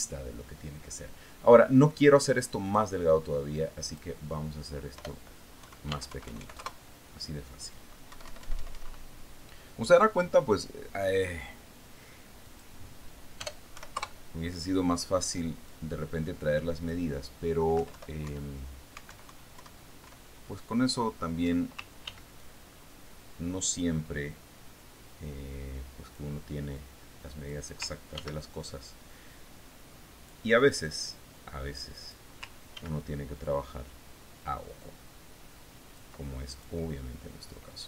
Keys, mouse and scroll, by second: 1.1 Delete, 4.1 click, 5.3 click, 6.5 BackSpace, 7.1 KP_5, 7.4 Tab, 7.7 KP_1, 7.8 KP_5, 8.1 KP_Enter, 9.6 Up, 12.7 click, 14.0 click, 14.9 BackSpace, 15.4 KP_Enter, 17.1-18.5 drag, 19.2 Down, 19.7 Up, 20.6 alt+Right, 21.0 alt+Left, 23.5 ctrl+d, 23.9-27.7 ctrl+drag, 28.3 click, 29.6 ctrl+d, 29.9-32.1 ctrl+drag, 32.5-33.7 drag, 34.2 ctrl+d, 34.5-37.8 ctrl+drag.